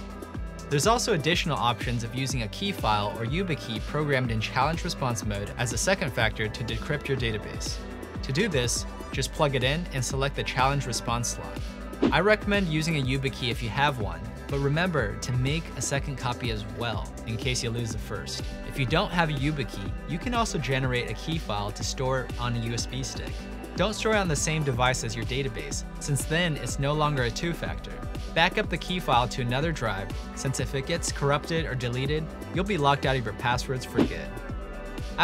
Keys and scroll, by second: 1.9-2.3 typing.